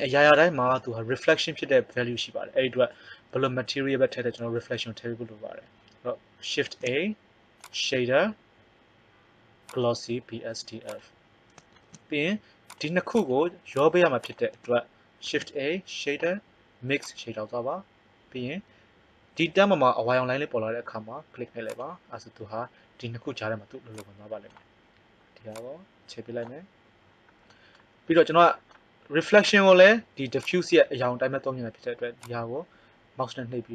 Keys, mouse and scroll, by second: 6.6 shift+a, 7.4 shift+a, 11.7 shift+a, 12.9 click, 15.2 shift+a, 18.8-21.7 middle drag, 21.7 click, 24.1 click, 30.4-31.9 drag.